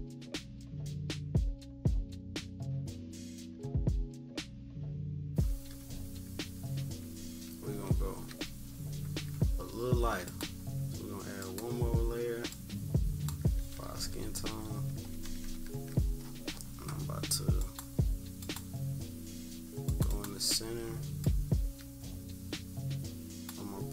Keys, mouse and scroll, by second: 1.3 click, 1.7 click, 2.7 click, 4.4 -, 4.7 -, 4.9 =, 5.1-5.5 scroll up 2, 5.5 -, 7.1 -, 7.7-8.4 scroll up 3, 7.7 =, 8.0 =, 8.6 scroll down 2, 10.2-13.6 drag, 13.6-15.7 typing, 14.8 scroll down 2, 15.9-17.6 scroll up 4, 17.6-18.6 drag, 19.9 click, 21.2-23.5 drag.